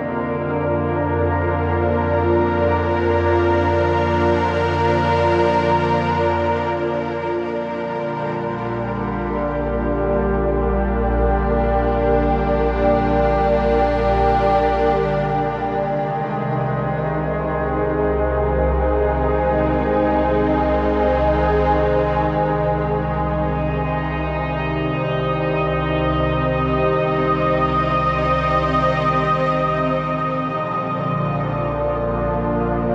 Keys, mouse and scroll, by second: 3.1-4.7 scroll down 1, 5.5-6.1 typing, 5.9 click, 6.2 click, 9.2-28.0 drag, 28.0 click, 29.6 scroll up 1, 29.9-31.5 typing, 30.1 click, 30.5 click, 31.1 click, 31.6 click.